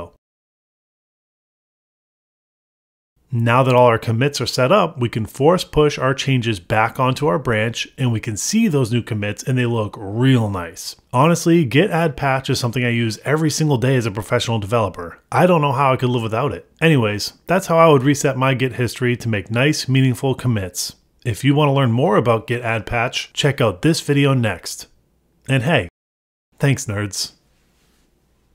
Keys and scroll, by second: 0.4 Return, 0.7 ctrl+d, 3.2 Escape, 3.5 Return, 4.2 Return, 5.1 Return, 6.4 Return, 7.4 Escape, 7.7 Return, 8.3 Return, 10.6 Return, 11.6 Return, 12.2 Return, 12.5 super+Tab, 12.9 super+r, 22.4 super+Tab, 27.1 ctrl+c.